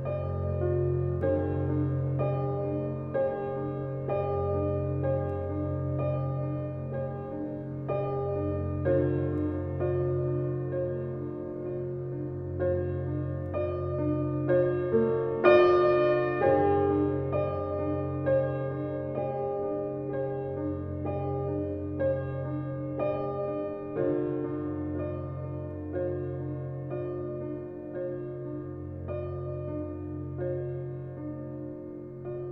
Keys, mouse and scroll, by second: 29.2-30.5 typing.